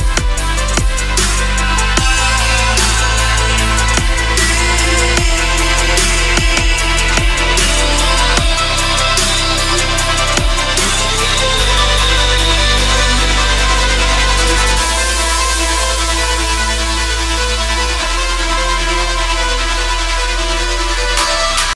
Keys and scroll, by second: 12.5 Return, 17.5 ctrl+-, 18.5 ctrl+=, 19.2 ctrl+-.